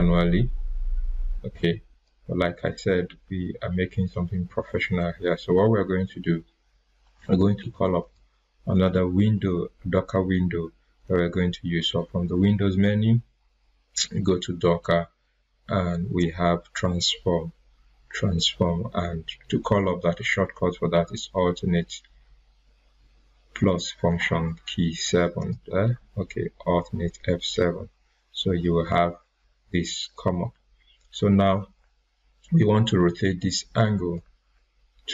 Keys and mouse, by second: 3.2 ctrl+z, 8.0 click, 25.3 click, 27.5 typing, 33.7-35.1 drag, 33.7 typing.